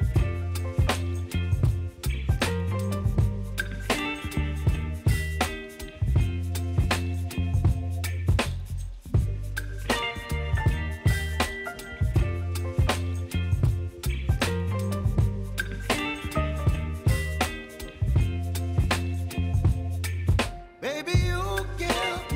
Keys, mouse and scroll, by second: 0.4 s, 1.1-9.3 drag, 10.8 alt+scroll up 1, 11.8 click, 12.4 ctrl+d, 14.1 click, 16.6 s, 17.4-18.9 drag, 18.9 v, 19.7-20.0 alt+scroll up 1, 20.6 click, 21.9-22.3 drag.